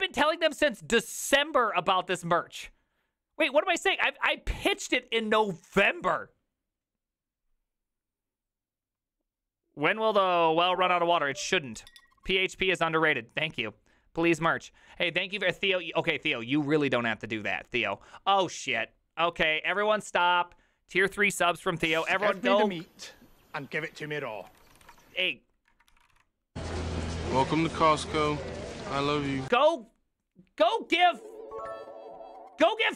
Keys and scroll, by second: 24.6-28.3 typing, 28.8 Return.